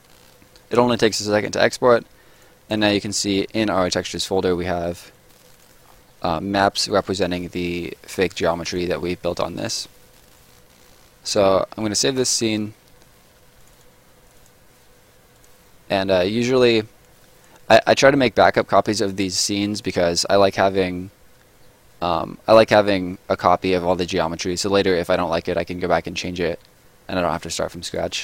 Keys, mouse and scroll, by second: 2.4 click, 5.1 click, 5.9-6.2 scroll up 1, 7.2 right click, 10.2 right click, 11.9 ctrl+right click, 12.0 ctrl+s, 13.6 click, 19.4 click, 27.2 click.